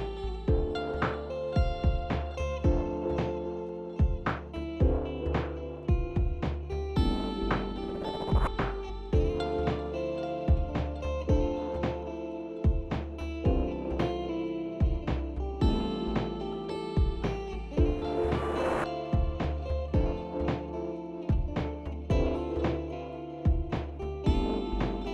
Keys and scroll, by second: 2.3 ctrl+a, 3.5 typing, 5.6 ctrl+0, 5.6 typing, 19.7 ctrl+-, 19.9 ctrl+-.